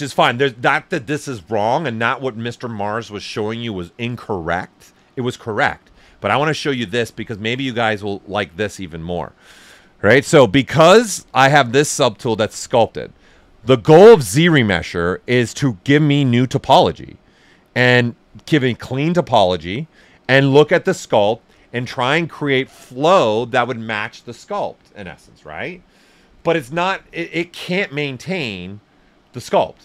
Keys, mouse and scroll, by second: 10.5 click, 10.5 typing, 12.6 right click, 13.8 click, 20.2 click.